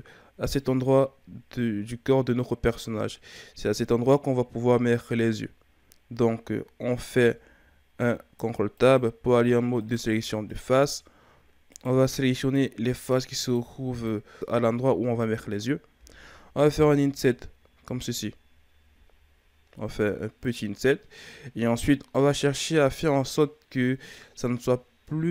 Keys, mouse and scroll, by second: 7.1 ctrl+Tab, 9.7 right click, 10.4 shift+right click, 11.7 shift+right click, 12.4 shift+right click, 12.9 shift+right click, 13.4 shift+right click, 13.9 shift+right click, 14.3-16.7 scroll up 1.